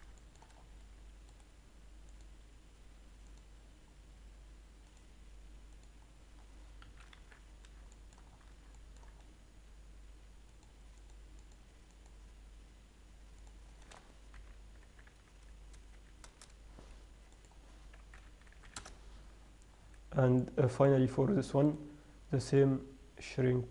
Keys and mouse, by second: 1.6 right click, 2.4-3.0 middle drag, 3.5 right click, 3.7-4.1 drag, 5.5-7.0 drag, 7.1 KP_3, 7.5 z, 7.8 middle click, 10.9-13.3 middle drag, 13.3-15.6 drag, 17.6-19.4 drag, 20.0 z, 20.1-22.0 middle drag, 22.0 right click.